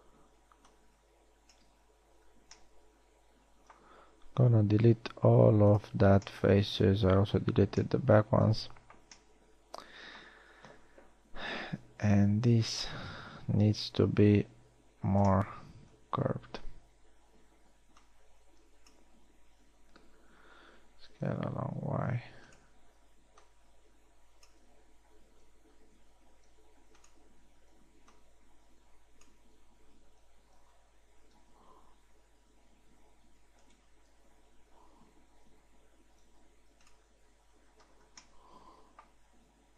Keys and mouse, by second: 1.0 b, 2.9 z, 5.4 x, 12.8 KP_3, 13.6 z, 14.6 ctrl+Tab, 17.0 a, 17.6 a, 17.8 b, 21.8 s, 23.7 a, 23.9 b, 26.5 s, 28.4 a, 28.6 b, 31.3 s, 35.7 s, 38.8 z, 39.6 middle click.